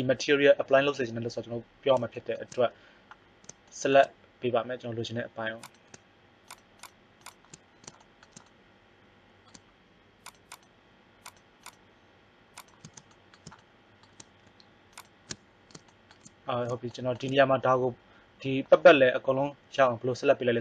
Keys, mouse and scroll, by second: 0.3-1.7 right drag, 1.7 middle click, 1.9-7.7 right drag, 8.0 right click, 13.1 middle click.